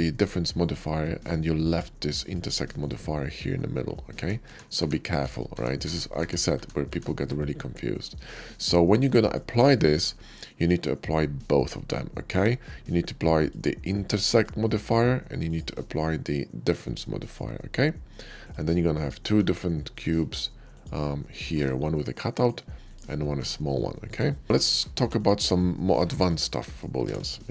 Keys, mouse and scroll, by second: 1.4 click, 1.9 click, 2.6 click, 4.1 ctrl+z, 7.9 middle click, 8.9 click, 9.5 middle click, 13.2 click, 14.1 click, 14.6 click, 15.3 click, 16.6 click, 17.0 click, 18.2 click, 19.2 g, 20.2 right click, 20.6 click, 22.3 right click, 22.6 click, 24.0 right click, 24.4 middle drag, 24.6 a, 24.9 x, 25.1 click, 25.5-25.9 middle drag, 26.0-26.3 middle drag, 26.5 middle click, 26.9 shift+a.